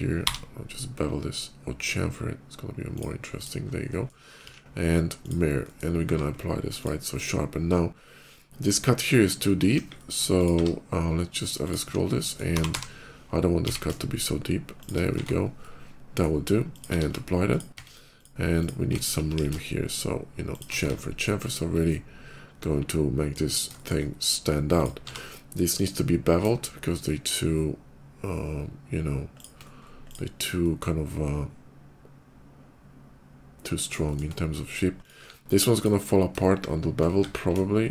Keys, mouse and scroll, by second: 0.2 b, 2.8 click, 3.2 click, 3.7 click, 4.3 alt+x, 5.1 click, 5.5 click, 5.9 q, 6.4 ctrl+q, 6.6 ctrl+click, 7.1 middle click, 7.7 middle click, 8.0-9.1 ctrl+middle drag, 9.6 KP_5, 9.8 middle click, 10.2 click, 10.4 q, 11.2 click, 11.5 click, 11.9 middle click, 12.3 g, 12.5 y, 12.7 g, 13.3 x, 14.6 click, 15.4 shift+middle click, 16.2 shift+middle click, 16.5 shift+click, 16.7 q, 17.3 click, 17.6 Tab, 18.0 click, 18.4 click, 18.8 alt+click, 19.1 ctrl+b, 19.7 middle click, 20.6 Tab, 21.0 middle click, 21.1 click, 21.7-23.1 middle drag, 23.6 shift+middle click, 24.4 click, 25.4 q, 25.4 click, 28.1-29.2 middle drag, 29.2 click, 29.8 shift+click, 30.3-33.6 shift+middle drag, 33.9 shift+middle click, 34.4 shift+middle click, 34.5 shift+middle click, 34.6 shift+click, 35.0 q, 35.5 click, 37.0 1.